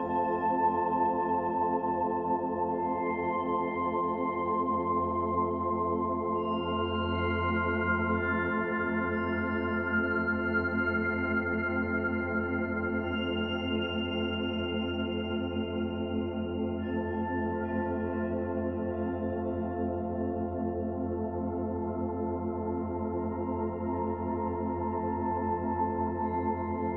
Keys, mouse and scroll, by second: 2.1 click, 6.7 click, 7.9 click, 14.4 click, 17.2 click, 22.0 middle click, 24.8 click.